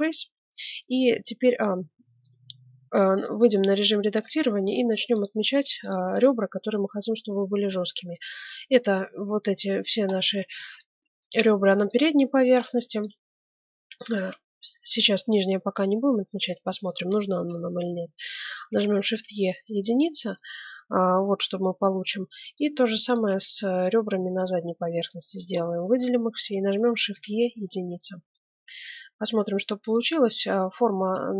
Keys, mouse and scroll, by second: 0.1 Tab, 0.8-2.9 middle drag, 4.2 ctrl+Tab, 5.1-7.8 right drag, 10.1-11.6 middle drag, 10.6 click, 11.6 right click, 11.8 click, 12.1 middle click, 13.9-15.9 right drag, 18.6 shift+e, 20.3-22.1 middle drag, 22.4-26.8 right drag, 23.6 middle click, 25.5-27.5 middle drag, 26.7 shift+e, 27.9 click, 28.4 Tab.